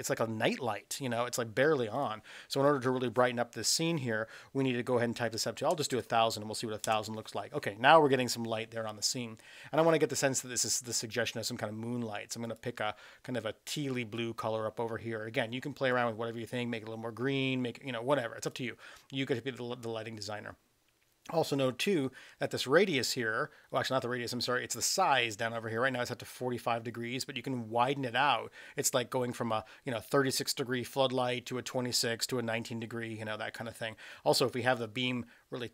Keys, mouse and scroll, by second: 1.9-9.0 drag, 5.9 KP_0, 10.6 click, 22.5-23.7 drag, 25.0-35.7 drag.